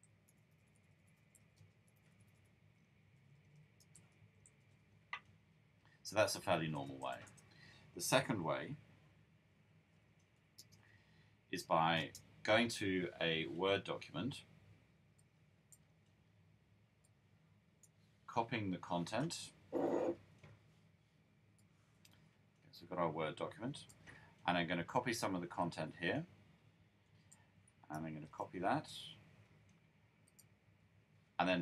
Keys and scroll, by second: 0.0-5.1 typing, 7.8-12.5 typing, 13.7-14.5 typing, 27.9 super+c.